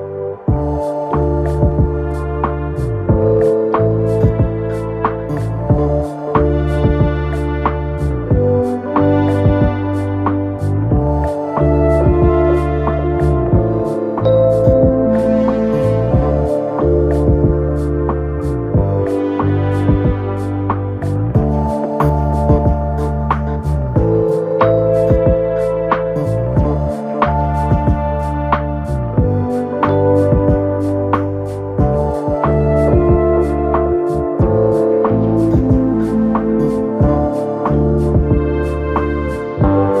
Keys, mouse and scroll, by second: 1.5 click, 1.8 g, 2.8-3.6 scroll down 4, 3.6 shift+middle click, 4.4-4.8 scroll down 1, 4.8-5.7 scroll up 2, 5.7 click, 6.3-7.0 scroll up 1, 7.0 e, 8.8 s, 9.7 s, 10.5 s, 12.3 KP_3, 12.8-14.0 scroll up 2, 14.0 click, 15.3 KP_1, 15.9-16.7 scroll down 4, 17.2 click, 18.2 e, 20.6 e, 23.5-26.3 scroll up 2, 26.3 shift+click, 27.1 f, 27.8 click, 28.7 shift+click, 29.0-29.5 scroll down 2, 29.5 KP_3, 30.6 click, 33.3 r, 34.8-36.1 scroll down 3, 36.1-37.0 scroll up 2, 37.0 click, 38.4-39.1 scroll down 2, 39.1 KP_1, 39.9-40.0 scroll up 2.